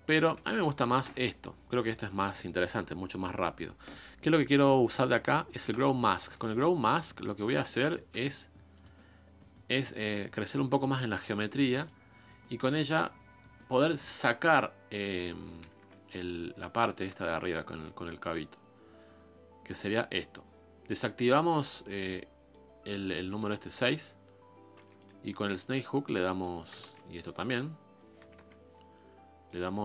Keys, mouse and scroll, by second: 1.5-5.8 scroll up 1, 6.3 s, 8.7 a, 9.6-11.8 middle drag, 11.8 a, 12.3-14.1 middle drag, 14.1 click, 14.5-15.7 middle drag, 15.7 KP_1, 16.5 shift+middle click, 17.0 f, 18.0-24.4 drag, 24.4 scroll down 2, 24.7 f, 25.5-26.8 drag, 26.8 ctrl+z, 27.3 click, 28.3 KP_1, 29.4-29.8 drag.